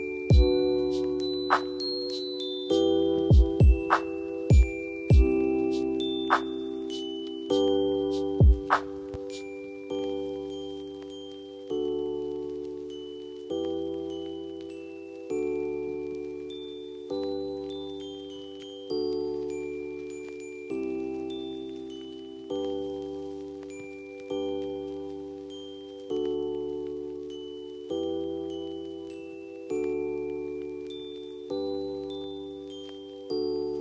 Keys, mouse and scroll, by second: 1.9 right click, 2.5-4.4 drag, 8.8 F2, 9.4-10.4 drag, 15.7 click, 17.9-18.8 drag, 22.8-24.1 drag, 25.1 shift+Page_Up, 27.0-28.0 shift+drag, 33.2 F2, 33.5-33.8 click.